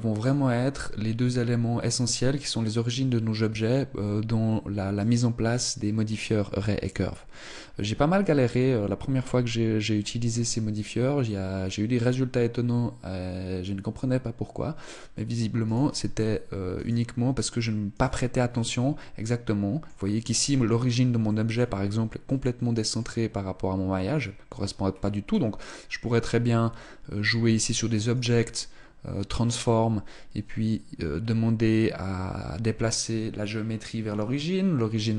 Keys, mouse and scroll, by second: 4.7 right click, 6.5 right click, 15.3 right click, 16.4 right click, 17.6 right click, 18.1 middle click, 19.9-20.7 scroll down 6, 20.9 middle click, 21.9 middle click, 24.5-25.2 scroll up 3, 25.3 middle click, 26.9 click, 27.8 click.